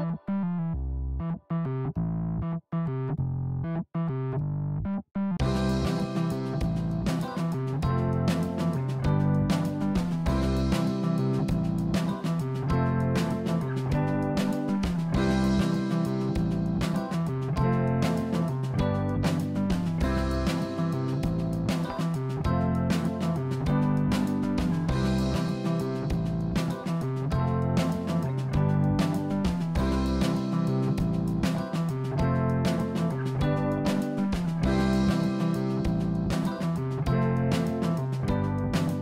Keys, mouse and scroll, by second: 2.8 click, 3.6 KP_1, 5.4 g, 8.8 click, 9.6 click, 10.0-11.6 middle drag, 11.9 click, 13.4 ctrl+b, 16.3 scroll down 2, 16.6 click, 17.2-18.9 middle drag, 19.1-19.4 scroll down 3, 19.4-21.0 middle drag, 28.3 KP_1, 29.1-31.2 scroll up 4, 35.8 Tab, 36.0 click, 37.5 click, 38.9-39.0 middle drag.